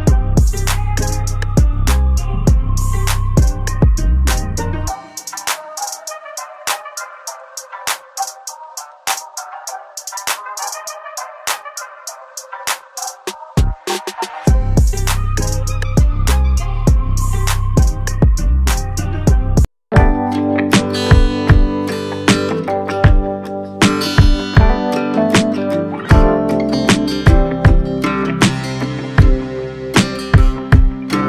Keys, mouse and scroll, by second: 0.2-2.7 drag, 2.7-3.6 scroll down 1, 3.8-5.3 alt+middle drag, 5.3 right click, 6.3 click, 7.3 scroll down 1, 8.0 alt+click, 11.4-12.1 scroll up 1, 12.3 alt+click, 13.3 alt+middle click, 14.1-14.6 scroll up 2, 14.6-16.3 alt+middle drag, 16.3-20.2 drag, 20.2-20.7 scroll down 1, 21.2 right click, 22.3 click, 22.9-24.5 alt+drag, 24.5 click, 26.6 scroll up 1, 27.0-28.3 alt+drag, 28.3 scroll down 1, 30.1 4, 30.5-31.2 scroll down 1.